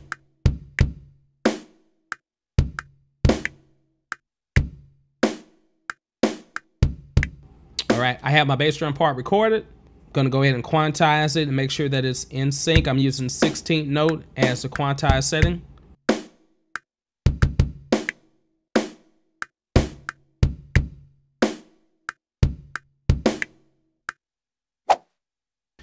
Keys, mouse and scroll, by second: 0.4 click, 0.8 click, 2.5 click, 3.2 click, 4.3 space, 4.6 space, 8.0 space, 8.8 click, 10.2 q, 11.8 click, 12.8 space, 24.7 space.